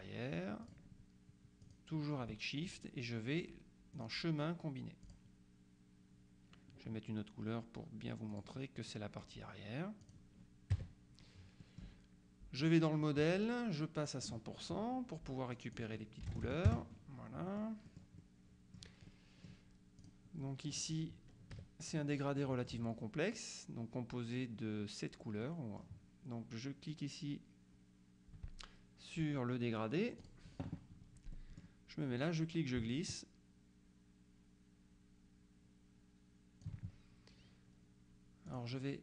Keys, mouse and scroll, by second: 0.7 click, 1.7 click, 4.1 click, 5.1 click, 8.4 click, 10.1 click, 10.8 KP_Subtract, 11.7 click, 12.7 click, 13.5 click, 14.1 click, 15.6 click, 16.3 KP_1, 16.7 KP_Enter, 17.5-18.5 middle drag, 19.1 middle click, 20.1 click, 21.6 KP_Subtract, 22.5 middle click, 25.5 middle click, 30.3 click, 31.4 middle click, 32.3-37.2 drag, 38.6 click.